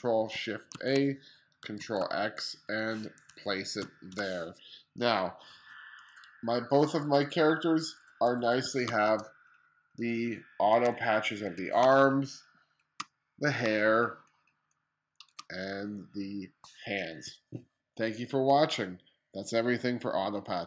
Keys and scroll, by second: 0.3 shift+super+a, 1.3 super+x, 3.4 super+v, 7.9 1, 8.4 space, 10.8 2, 11.4 space, 13.2 space.